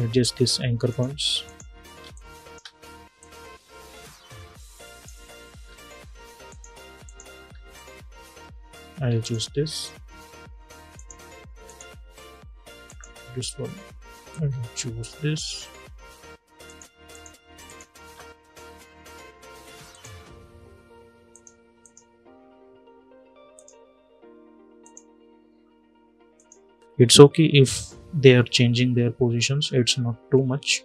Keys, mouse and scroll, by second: 1.7 space, 1.8 click, 2.2 space, 2.9-5.3 drag, 5.3 scroll down 1, 6.2 click, 7.2 scroll down 1, 8.9-16.4 drag, 19.6 click, 30.7-30.8 drag.